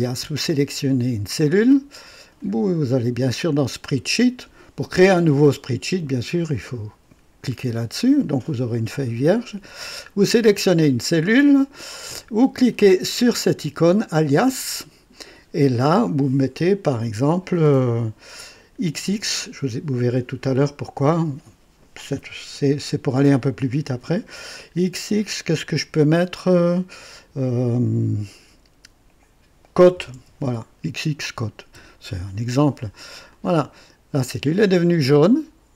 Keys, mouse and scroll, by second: 2.3 click, 3.8 click, 10.4 click, 14.1 click, 18.8 typing, 29.5-31.7 typing, 33.3 click.